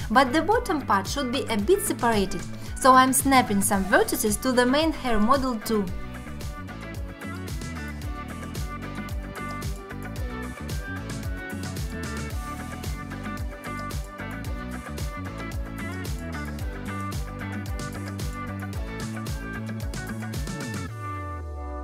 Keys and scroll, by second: 6.3 g, 6.8 g, 7.6 alt+z, 9.2 3, 10.1 alt+z, 10.9 x, 13.0 ctrl+z, 13.3 ctrl+z, 14.1 x, 15.6 1, 16.3 shift+x, 17.6 g, 18.9 ctrl+z, 19.5 g, 20.7 g, 21.1 g, 21.6 alt+q.